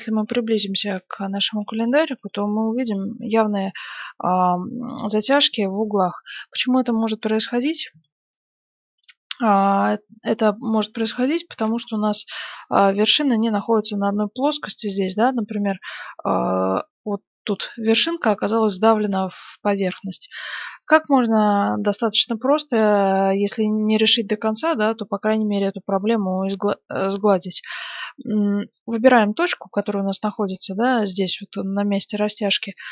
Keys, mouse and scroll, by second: 1.2-4.4 middle drag, 4.8-6.4 middle drag, 6.8-9.8 middle drag, 10.4-11.5 middle drag, 11.6 Tab, 12.0-16.8 middle drag, 18.9-20.7 middle drag, 29.8-31.5 drag, 32.2-32.9 drag.